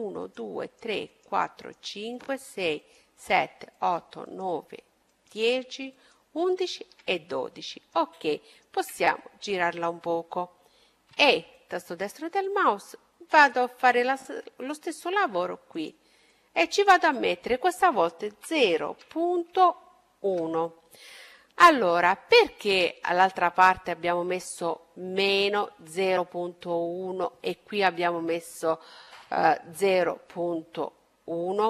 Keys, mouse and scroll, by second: 6.1-8.2 middle drag, 10.1 e, 11.2-13.3 drag, 14.5-16.4 drag, 20.8-24.1 middle drag, 30.5-31.6 middle drag.